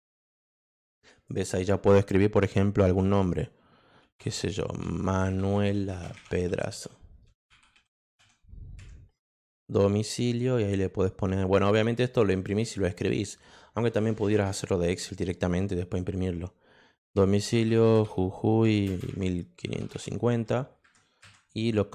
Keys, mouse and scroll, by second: 0.7 click, 1.2 click, 4.0-8.0 typing, 17.2-20.4 typing.